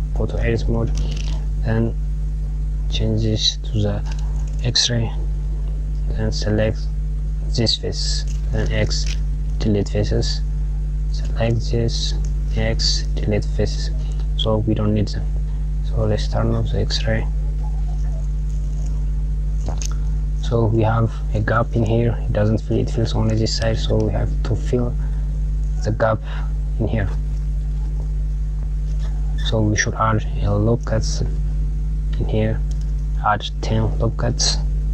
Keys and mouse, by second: 4.2-6.1 drag, 8.2 x, 10.8 click, 12.2 x, 16.1 click, 16.8 KP_Add, 18.2 click, 24.1 click, 27.8 click, 30.9 ctrl+r.